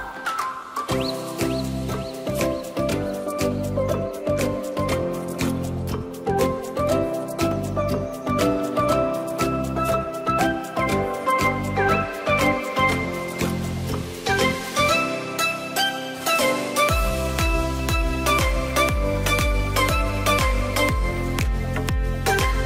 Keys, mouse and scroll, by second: 0.7 click, 1.0-1.7 scroll down 1, 1.7 click, 2.2 Tab, 2.8 click, 3.5-5.3 middle drag, 5.3 click, 5.5 Tab, 5.8-6.3 scroll up 2, 6.3-9.3 middle drag, 9.3 click, 10.6 click, 10.9 click, 11.7 click, 12.5 shift+click, 13.3 shift+click, 14.2 shift+click, 16.6 e, 21.7 click, 22.1-22.5 scroll down 1, 22.5-22.6 middle drag.